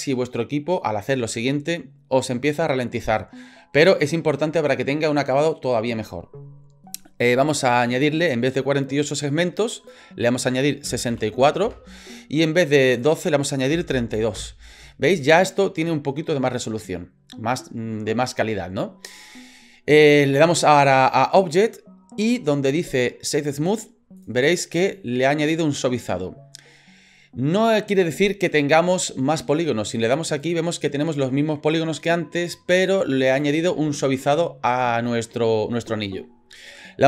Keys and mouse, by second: 9.8-12.1 drag, 13.0-14.9 drag, 21.6-24.2 drag, 30.4 click, 33.3 click.